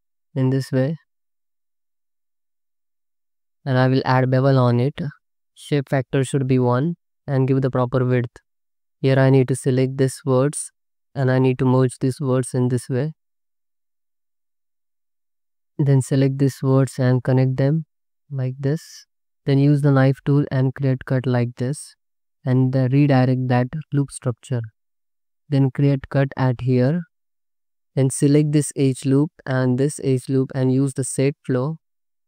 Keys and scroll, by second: 3.7 ctrl+b, 8.1 5, 8.8 1, 11.9 m, 14.5 m, 15.3 c, 15.5 2, 16.7 j, 17.4 2, 18.2 ctrl+x, 20.5 space, 21.4 z, 22.0 space, 23.7 space, 24.2 Tab, 25.1 alt+shift+z, 26.8 y, 27.2 space, 27.7 2.